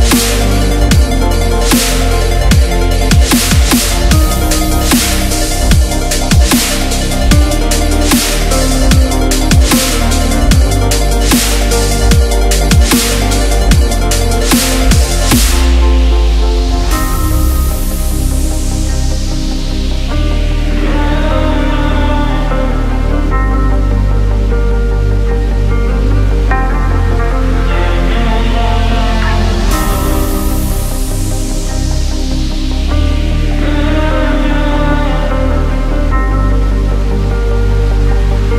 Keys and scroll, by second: 19.1 ctrl+j, 30.1 Down, 30.8 Up, 31.9 Down.